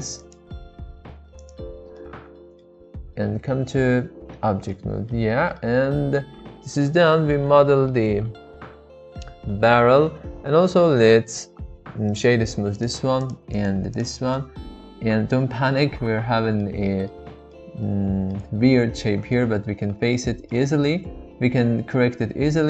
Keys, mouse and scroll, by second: 0.2 click, 1.4 click, 1.9 middle click, 3.6 Tab, 4.7-5.1 middle drag, 5.3-7.5 shift+middle drag, 7.7-8.0 shift+middle drag, 8.6-10.9 middle drag, 12.2-12.9 right drag, 13.2 click, 13.5-14.0 right drag, 14.3-16.6 middle drag, 16.8-17.3 middle drag, 17.5 middle click, 20.2-20.6 middle drag.